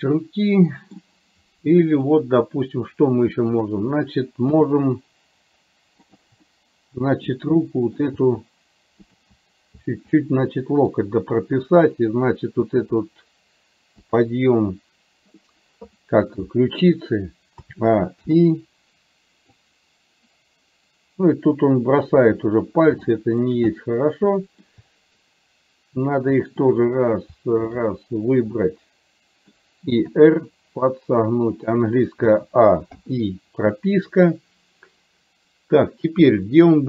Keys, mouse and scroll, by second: 3.6 click, 4.6 g, 6.6 middle click, 7.7 middle click, 8.3 g, 10.2-11.7 middle drag, 12.7 r, 17.7 a, 18.3 i, 19.8-22.3 drag, 23.2 shift+middle click, 23.8-24.8 middle drag, 26.7 click, 27.7 shift+click, 28.7 middle click, 30.2 r, 32.3 a, 33.1 i.